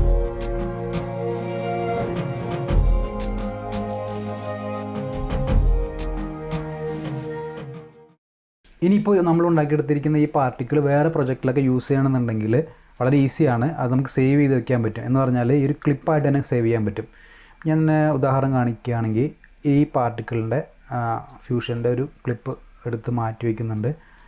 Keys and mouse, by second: 18.0 click, 19.7-21.2 drag, 22.4-23.0 drag, 23.7 click, 24.1-24.2 drag.